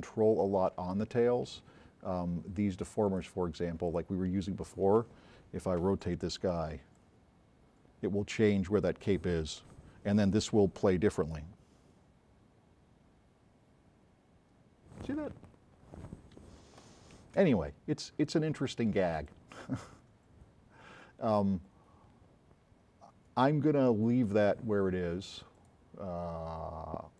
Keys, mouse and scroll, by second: 5.8 c, 17.3 s, 17.3 right click, 21.4 click, 25.6 click.